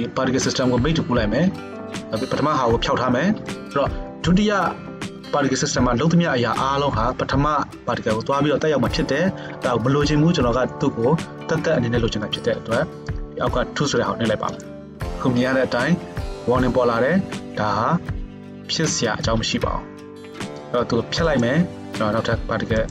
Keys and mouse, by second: 3.6-14.5 middle drag, 14.5 click, 16.4-22.9 drag.